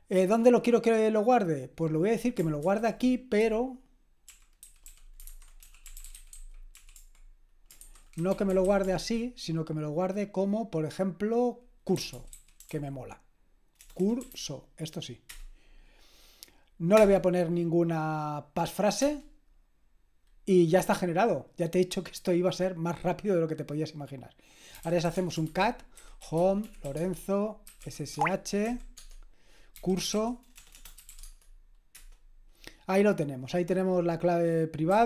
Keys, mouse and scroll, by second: 3.2-9.5 typing, 11.9-15.3 typing, 16.9 Return, 19.0 Return, 24.6-31.9 typing, 34.9 q.